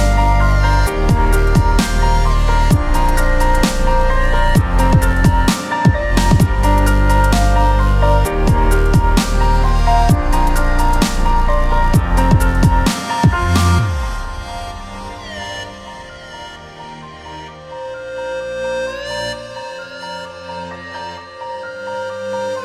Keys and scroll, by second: 7.7 space.